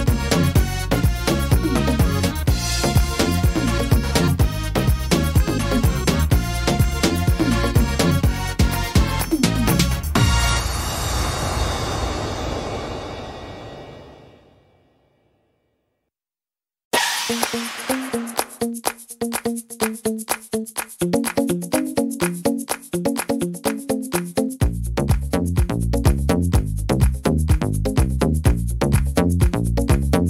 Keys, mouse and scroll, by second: 0.0 click, 1.8 click, 2.9 middle click, 4.2 click, 5.7 click, 6.9 middle click, 7.5 shift+middle click, 8.0-8.5 scroll up 7, 10.6-11.4 scroll up 2, 10.6 r, 17.0 click, 17.0 middle click, 18.1 shift+middle click, 18.5 scroll up 1, 21.1 scroll up 1, 21.2 middle click, 21.9-22.3 scroll up 1, 22.5 shift+middle click, 24.5 click, 27.3 middle click, 27.6-28.5 scroll down 2, 28.1 middle click, 28.6 shift+middle click, 29.8 click.